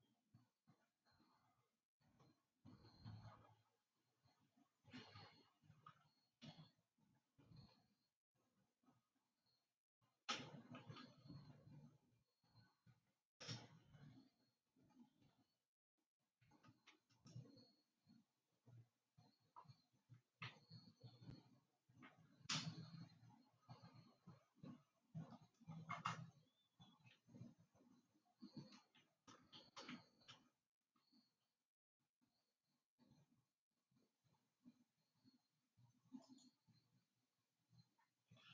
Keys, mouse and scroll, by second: 0.1 g, 6.6 g, 15.4-17.8 scroll up 7, 17.8-24.7 middle drag, 29.7 shift+d.